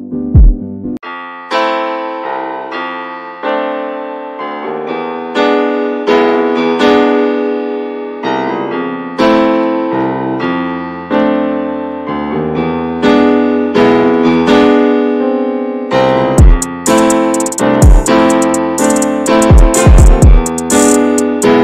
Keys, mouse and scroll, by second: 0.0 ctrl+s, 0.2 Tab, 0.4 click, 0.7-1.3 scroll up 3, 0.9 shift+middle click, 1.6-2.7 alt+middle drag, 2.7 click, 3.2 shift+middle click, 4.1-5.1 scroll up 5, 4.3 shift+middle click, 5.1 click, 6.5 ctrl+b, 7.8 click, 8.4-9.8 alt+middle drag, 9.8 e, 10.9 shift+middle click, 11.5 e, 12.3 click, 12.6 alt+shift+click, 13.2 alt+shift+click, 13.5 middle click, 14.0 e, 14.3 alt+s, 15.7-16.1 scroll up 1, 16.1 3, 16.3 click, 16.8 alt+shift+click, 17.4 2, 17.5 click, 17.9 alt+shift+click, 18.2 middle click, 18.4-18.8 scroll up 2, 18.5 shift+middle click, 18.8 middle click, 19.6 s, 20.5 middle click, 20.8 ctrl+b.